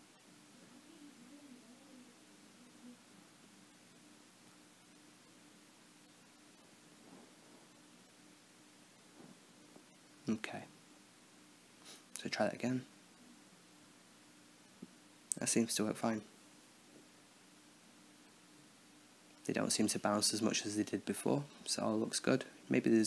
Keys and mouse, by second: 0.4-2.1 drag, 3.1 Tab, 3.5-5.1 drag, 5.1 s, 7.0 click, 7.8 click, 8.3 Tab, 8.9 Tab, 9.4-9.9 drag, 9.9-10.5 middle drag, 10.5 right click, 10.8 Tab, 11.7 alt+a, 16.6 KP_0.